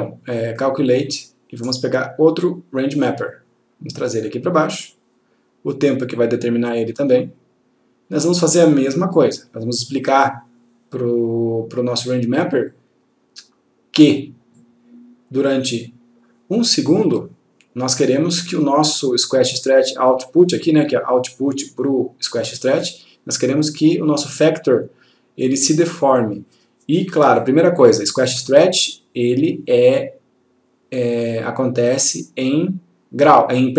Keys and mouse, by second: 3.1 click, 10.2-12.1 click.